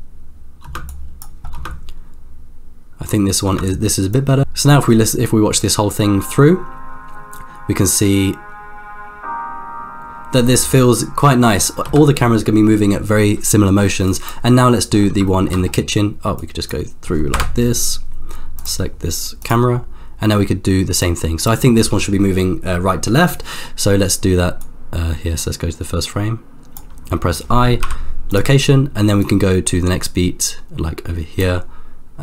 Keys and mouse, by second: 0.6 space, 0.9 click, 1.7 space, 3.5 space, 4.3 click, 11.9 space, 14.1 click, 14.7 middle click, 15.3 shift+middle click, 16.4 click, 17.3 KP_0, 19.4 click, 21.0 click, 24.6-27.0 drag, 27.8 i, 29.2-31.7 drag.